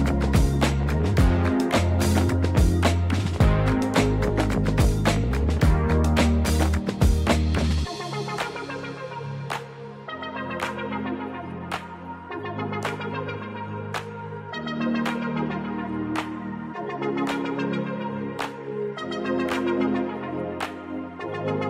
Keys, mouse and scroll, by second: 0.3 click, 2.4 click, 6.2-7.9 drag, 9.6 click, 10.5 click, 11.5 click, 16.9-18.3 drag, 21.1 click.